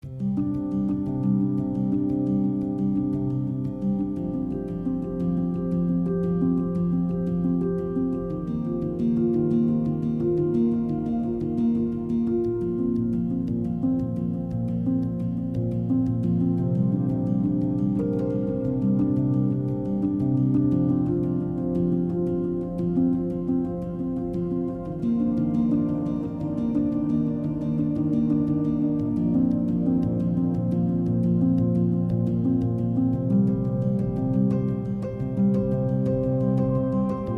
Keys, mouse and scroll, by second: 2.8 x, 4.1 shift+a, 6.8-10.9 drag, 10.9 r, 13.2 KP_3, 14.3 s, 17.2 Tab, 18.2 click, 19.5 x, 21.1 a, 21.4 s, 24.6 click, 26.3 click, 27.4 click, 28.2 s.